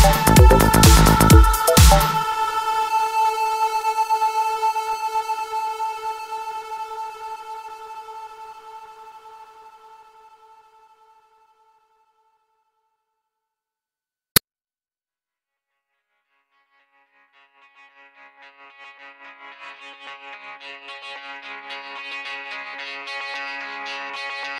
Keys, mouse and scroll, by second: 0.0 click, 0.5 click, 2.7 click, 2.8 click, 3.6 click, 3.7 click, 8.5 F4, 9.9 F4, 10.0 click, 11.1 middle click, 11.4 middle click, 11.5 scroll up 1, 13.5 middle click, 13.8-14.2 scroll down 1, 14.5 F4, 15.8 F9, 15.9 click, 17.4 click, 17.5 click, 22.9 click, 23.1 click, 23.9 F10.